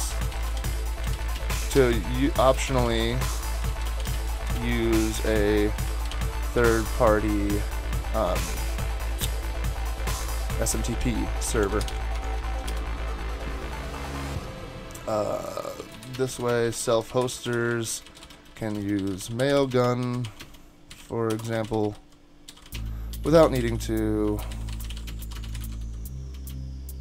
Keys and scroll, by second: 0.0-7.3 typing, 10.4-12.7 typing, 15.7-27.0 typing.